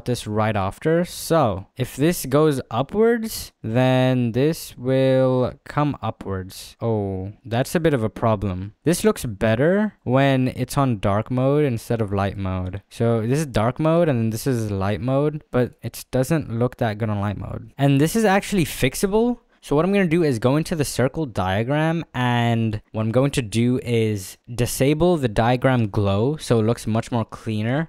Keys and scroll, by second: 6.7 space, 15.8 d, 17.7 ctrl+z.